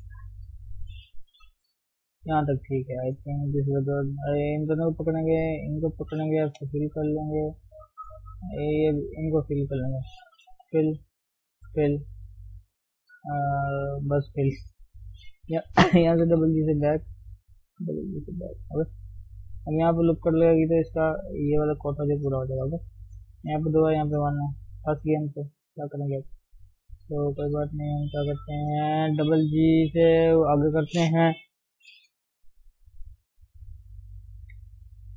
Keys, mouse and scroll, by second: 0.8 shift+click, 1.9 scroll down 3, 2.1 shift+middle click, 2.3-3.0 scroll up 2, 3.0 scroll down 1, 3.2-4.3 shift+middle drag, 4.3 click, 5.4 shift+Left, 5.8 shift+Left, 6.6 f, 7.8 Left, 8.6 Left, 9.6 scroll down 2, 9.7 middle click, 10.6 f, 11.0 middle click, 11.6 f, 12.0-15.3 middle drag, 15.3 click, 16.1 g, 17.3 click, 17.6 g, 19.0-25.7 middle drag, 25.7 KP_1, 26.1-26.6 scroll up 2, 26.6-27.0 scroll down 1, 27.0 click, 29.1 g, 30.1 g, 33.4 click.